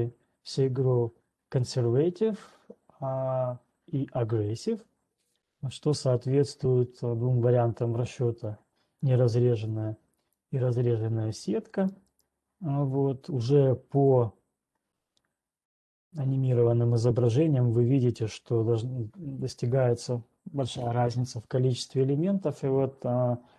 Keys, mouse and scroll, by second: 9.0 click, 10.5 click, 14.1 right click.